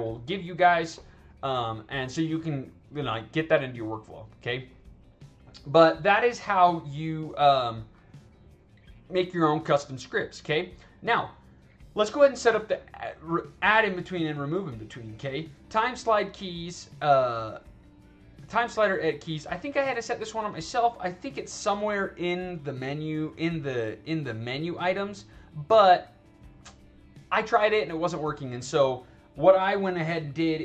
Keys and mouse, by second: 6.3-7.8 drag, 14.4 click, 24.1 click.